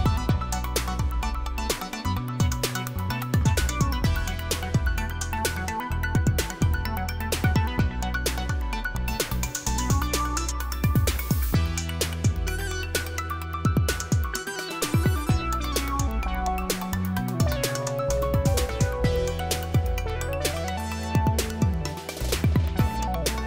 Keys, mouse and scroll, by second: 0.4 click, 2.5-5.0 typing, 5.2 Return, 7.5 click, 7.5-8.4 typing, 7.8 click, 8.5 click, 9.8 click, 11.0-12.7 typing, 17.6-19.5 typing.